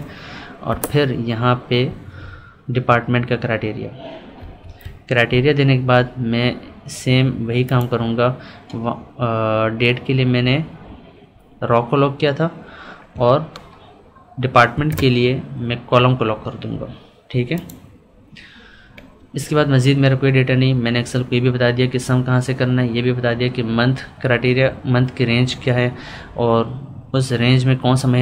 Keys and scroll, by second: 0.7 Left.